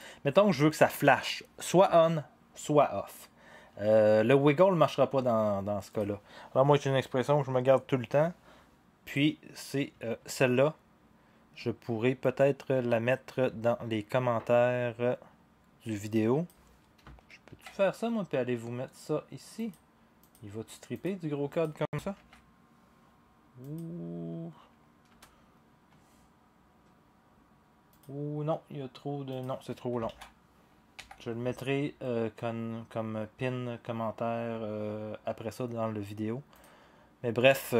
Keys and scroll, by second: 17.5 ctrl+c, 22.1 ctrl+v, 25.1 Return, 30.1 ctrl+a, 30.9 Delete.